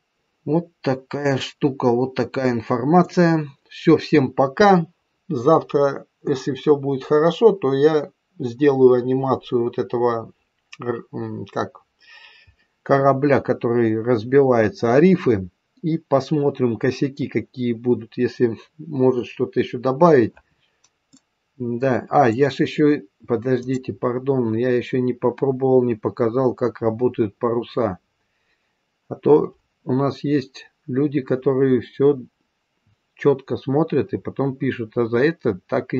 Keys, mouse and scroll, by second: 21.1 middle click, 23.6 click.